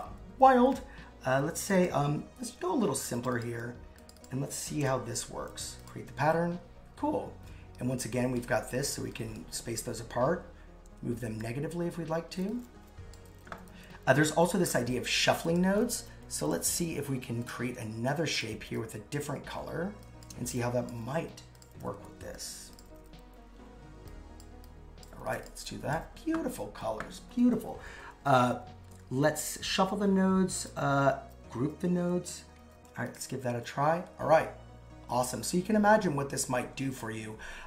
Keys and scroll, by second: 10.9 super+z.